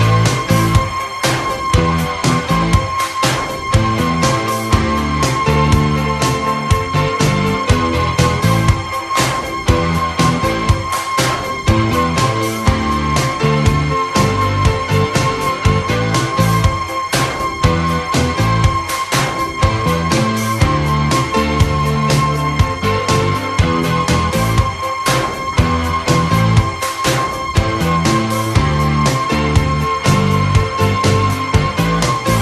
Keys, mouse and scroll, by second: 0.3 alt+d, 1.0-10.2 typing, 1.2 alt+d, 2.0 alt+d, 2.7 alt+d, 3.5 alt+d, 4.2 alt+d, 4.3 ctrl+z, 4.5 alt+d, 6.6 alt+d, 7.1 alt+d, 7.6 alt+d, 8.2 alt+d, 8.9 alt+d, 9.3 alt+d, 10.0 alt+d, 10.9 alt+d, 11.4 alt+d, 11.7 alt+d, 11.9-19.8 typing, 12.4 alt+d, 12.9 alt+d, 13.2 alt+d, 13.6 alt+d, 13.9 alt+d, 14.3 alt+d, 15.4 alt+d, 15.6 alt+d, 16.0 alt+d, 16.5 alt+d, 16.8 alt+d, 17.5 alt+d, 17.7 ctrl+z, 17.8 alt+d, 18.1 alt+d, 18.8 ctrl+z, 19.3 alt+d, 19.8 ctrl+z, 19.9 alt+d, 21.2-22.9 typing, 21.5 alt+d, 21.9 alt+d, 23.0 alt+d, 23.7 alt+d, 24.3 alt+d, 24.3-28.6 typing, 24.8 alt+d, 25.7 alt+d, 26.4 alt+d, 26.7 alt+d, 27.2 alt+d, 28.9 alt+d, 29.3 alt+d, 29.7-32.4 typing, 31.6 alt+d, 32.0 alt+d, 32.2 alt+d.